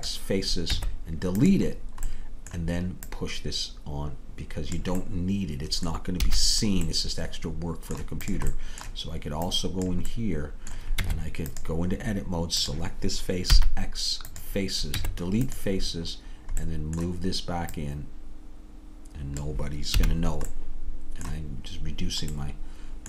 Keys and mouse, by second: 0.7 Tab, 3.1-6.3 drag, 6.3 a, 8.8-11.7 drag, 11.0 Tab, 13.6 click, 13.6 x, 15.0 Tab, 17.8-20.1 drag, 20.1 a.